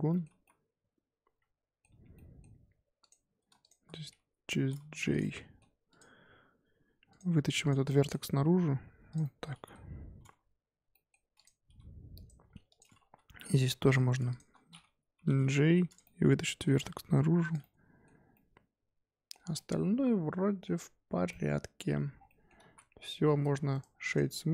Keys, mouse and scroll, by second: 0.1 middle click, 0.3 z, 0.4-1.9 middle drag, 1.9 1, 2.1 middle click, 3.0 click, 3.6 shift+click, 4.5 j, 4.9 1, 5.1 click, 5.2 middle click, 5.9 click, 7.1 click, 7.9 middle click, 8.4 g, 9.2-11.3 middle drag, 11.3 click, 11.6 g, 12.4 g, 13.0 2, 13.7 1, 13.8 click, 14.3 shift+click, 15.1 j, 15.5 1, 15.8 click, 16.0 middle click, 16.7 g, 17.6-19.5 middle drag, 19.5 scroll down 1, 19.5-20.7 middle drag, 20.7 Tab, 21.1 Tab, 21.3 middle click, 22.0 Tab, 22.1 scroll down 1, 22.2-22.6 middle drag, 22.6 z, 23.2-23.7 scroll up 4, 23.7-24.5 right drag.